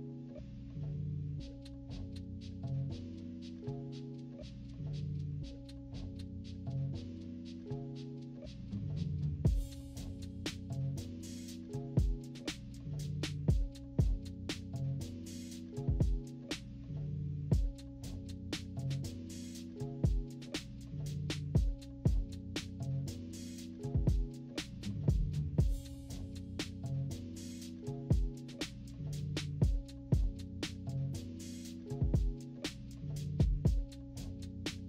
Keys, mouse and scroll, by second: 0.5 ctrl+z, 1.3 click, 1.9 click, 2.7 click, 3.3 click, 4.0 click, 5.2 click, 6.1 click, 7.0 -, 7.2 scroll up 2, 7.2 -, 7.4 =, 7.5 scroll down 2, 7.9 click, 8.7 z, 9.1 click, 9.4 click, 9.5 click, 9.9 click, 10.2 click, 10.5 click, 11.0 -, 11.3 =, 11.6 scroll up 2, 11.8 click, 12.5 click, 12.9 click, 13.6 click, 15.2 click, 15.4 click, 15.8 click, 16.5 click, 16.8 click, 17.4 click, 17.7 click, 18.0 click, 18.4 click, 18.9 click, 19.1 click, 20.0 z, 20.7 click, 20.9 click, 21.5 click, 22.8 click, 23.6 click, 24.2 click, 25.8 click, 26.6 click, 27.1 click, 27.5 click, 28.0 click, 28.4 click, 28.7 click, 29.1 click, 29.5 click, 29.9 -, 30.1 scroll down 4, 30.2 -, 30.4 =, 30.5 scroll up 2, 31.3 click, 31.9 click, 32.4 click, 33.0 click, 33.1 click, 33.5 -, 33.7 scroll down 1, 33.8 =, 34.1 click.